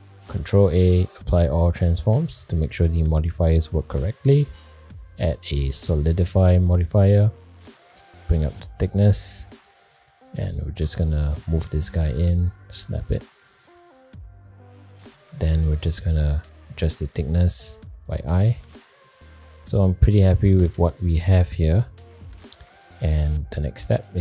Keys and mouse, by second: 0.1 ctrl+a, 4.6-6.1 drag, 6.6-7.0 middle drag, 8.1-9.5 drag, 9.9 middle click, 10.8 g, 14.9 middle click, 15.6 shift+middle drag, 17.1-19.1 shift+drag, 19.8 middle click, 21.2-22.2 middle drag, 22.5 middle click.